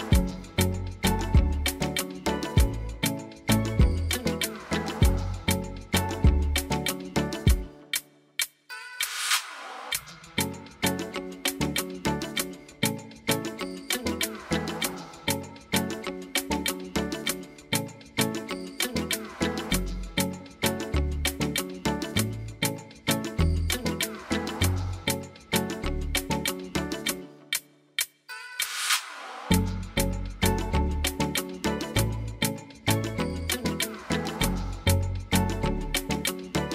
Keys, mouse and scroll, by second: 1.8 click, 5.1 click, 5.2 click, 5.5 click, 11.0 click, 13.3 click, 14.0 click, 14.5 click, 18.5 click, 35.2 click.